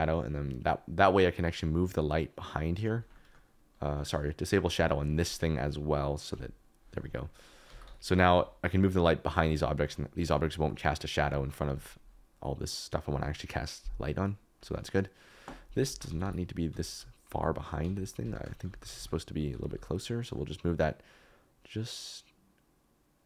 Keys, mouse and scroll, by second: 3.1 middle click, 3.8 middle click, 6.3 click, 7.4 click, 7.6 g, 7.8 y, 15.8-19.6 typing, 18.2 Escape.